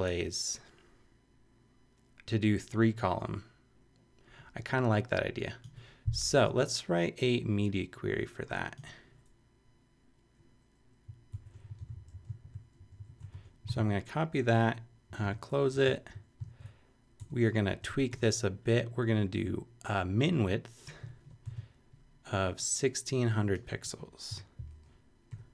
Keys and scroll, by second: 11.3 shift+super+Left, 11.9 super+Up, 12.3 super+Up, 12.4 super+Right, 12.8 super+Up, 13.1 super+Right, 13.3 super+Return, 13.7 super+v, 14.4 super+Return, 15.1 shift+Return, 15.7 shift+Up, 16.4 super+Up, 17.2 super+Left, 17.7 Return, 21.1-21.9 typing, 23.7 |, 24.3 6.